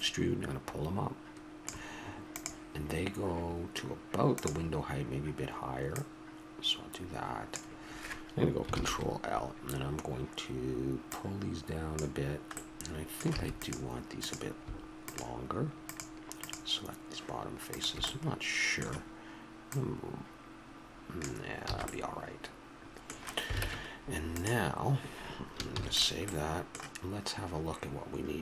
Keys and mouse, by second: 5.9-7.8 drag, 8.7 ctrl+l, 11.1-12.9 drag, 12.9 middle click, 13.3 a, 13.6-18.2 drag, 18.2-19.5 middle drag, 19.6-21.2 drag, 21.7 a, 21.9 click, 22.5-23.6 middle drag, 23.6 ctrl+Tab, 25.1-26.3 middle drag, 25.7 ctrl+s.